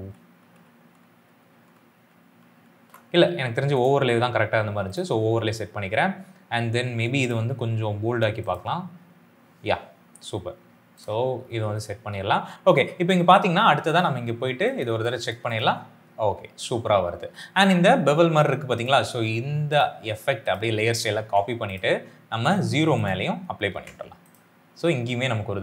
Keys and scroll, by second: 0.4-2.4 typing, 15.0 space, 21.1 ctrl+c, 23.5 ctrl+v.